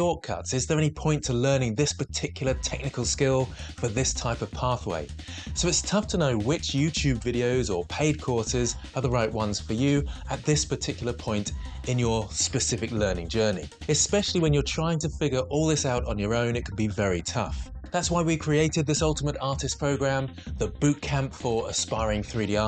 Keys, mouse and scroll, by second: 0.0 shift+d, 0.8 x, 2.0 x, 2.2 g, 2.3 x, 4.0 Tab, 4.9 2, 6.2 g, 6.2 y, 9.6 ctrl+z, 10.4 ctrl+r.